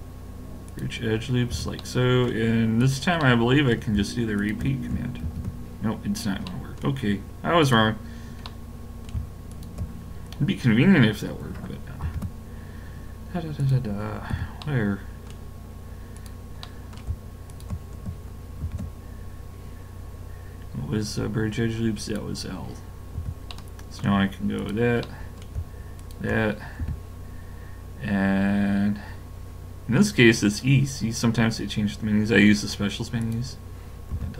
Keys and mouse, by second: 1.5 a, 2.8-6.3 drag, 5.2 shift+r, 7.6 click, 8.2-11.3 middle drag, 11.3 click, 12.0 ctrl+e, 14.3 a, 14.6 middle click, 16.2-19.4 drag, 18.6 ctrl+e, 23.2 a, 24.6-27.9 drag, 26.8 w, 34.1 a.